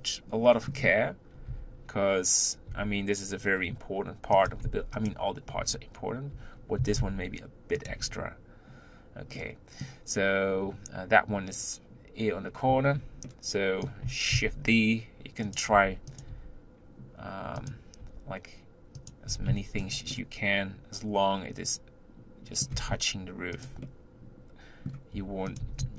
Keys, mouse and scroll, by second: 0.0-1.5 middle drag, 1.5 Tab, 2.8 g, 5.6 Tab, 6.4 Tab, 6.8 s, 7.9 Tab, 9.4-10.5 middle drag, 10.5-13.3 scroll up 1, 13.3-14.4 middle drag, 14.4 shift+d, 15.9 r, 16.3 g, 20.1-22.7 middle drag, 22.7 g, 23.8-25.1 middle drag, 25.1 r.